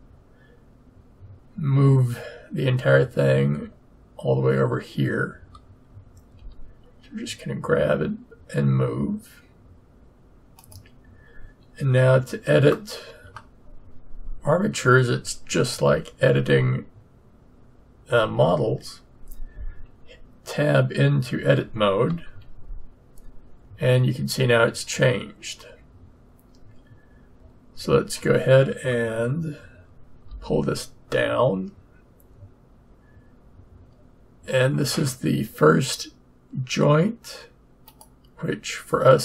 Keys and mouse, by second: 6.3 g, 12.7-15.1 middle drag, 22.2 Tab, 30.2 g.